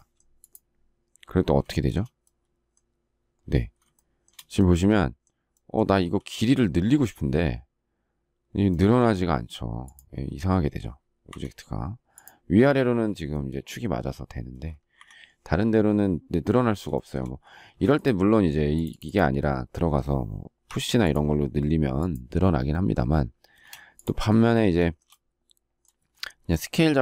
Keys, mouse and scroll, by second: 1.7 shift+middle click, 3.9 shift+middle click, 11.2 Escape, 14.9 Escape, 16.9 shift+middle click, 17.7 space, 23.4 space, 23.6 Escape, 24.8 shift+middle click.